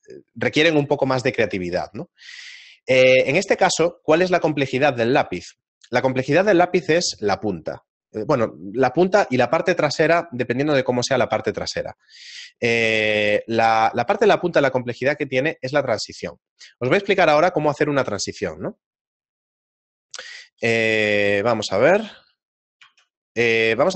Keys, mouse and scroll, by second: 22.0 middle click, 22.4 shift+middle click, 22.8 shift+a.